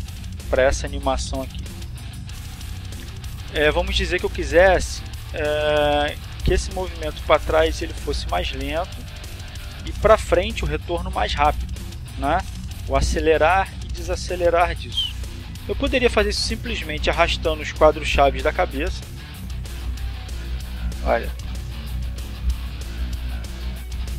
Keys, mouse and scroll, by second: 0.0-2.4 drag, 3.4 click, 4.1 click, 5.2-9.2 drag, 14.7 a, 16.4 click, 18.3 click, 21.7 click, 22.6 click, 23.7 shift+middle click.